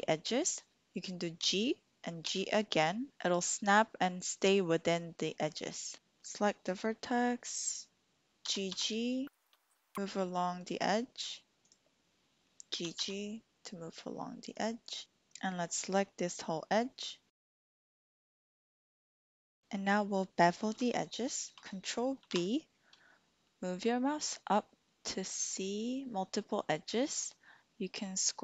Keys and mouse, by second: 1.4 g, 2.4 g, 5.9 1, 8.4 g, 8.7 g, 10.6 click, 12.7 g, 12.9 g, 14.5 click, 15.0 click, 17.6 alt+shift+click, 18.3 alt+shift+click, 18.4 click, 19.3 click, 22.2 ctrl+b.